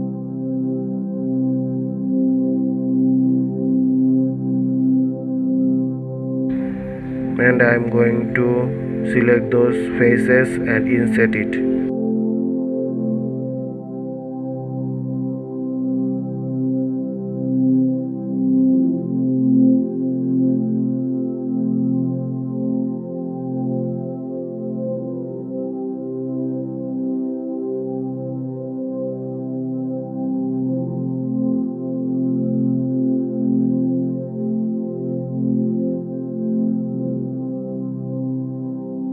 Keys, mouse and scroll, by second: 0.8 alt+click, 2.4 g, 4.6 scroll up 1, 8.6 click, 9.7 shift+click, 10.4 shift+click, 11.1 shift+click, 11.6-12.9 middle drag, 12.9 shift+click, 13.4 shift+click, 13.9-15.6 middle drag, 15.6 shift+click, 16.0 shift+click, 16.4 shift+click, 17.0 shift+click, 17.6-19.3 middle drag, 19.3 KP_3, 21.4 middle click, 22.1-22.4 scroll down 3, 22.9 scroll up 1, 23.7 s, 34.0 ctrl+z, 36.2 alt+e.